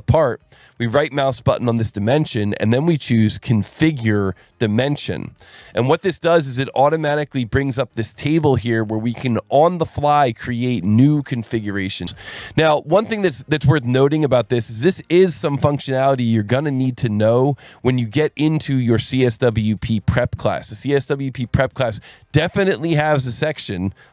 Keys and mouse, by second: 1.9 right click, 5.9 click, 12.8 click, 13.3 click, 17.9 click, 19.0 click.